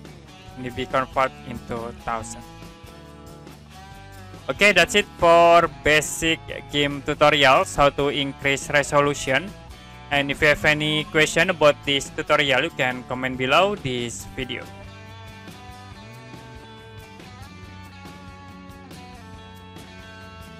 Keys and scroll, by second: 15.0 Print.